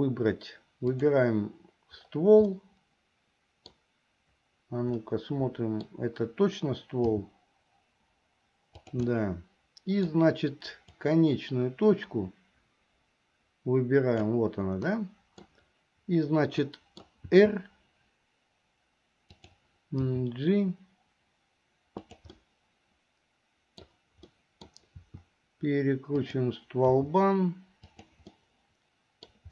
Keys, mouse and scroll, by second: 0.9 click, 2.5-3.8 middle drag, 5.1 middle click, 7.1 g, 9.1-11.1 middle drag, 11.1-14.4 drag, 14.9 middle click, 16.7 middle click, 17.3 r, 20.1 g, 22.4-23.0 scroll up 1, 23.0 middle click, 24.4 middle click, 25.0 r, 27.0 g, 28.3 scroll up 1, 28.5 middle click, 29.3 scroll down 1.